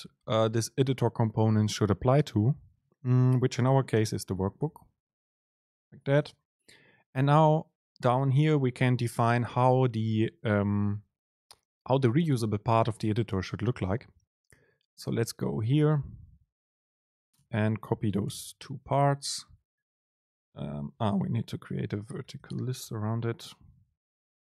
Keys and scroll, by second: 6.1 Down, 16.5 shift+Right, 17.0 shift+Down, 18.3 super+c, 21.0 super+c, 21.1 super+space.